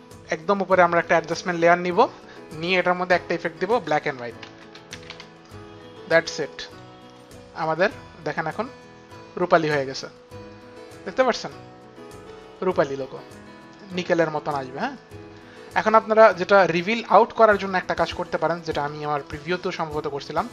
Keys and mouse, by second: 1.0 click, 3.2 click, 3.9-5.5 typing, 6.7 click, 7.7 click, 11.4 click, 13.8 click, 15.0 click, 19.3 click.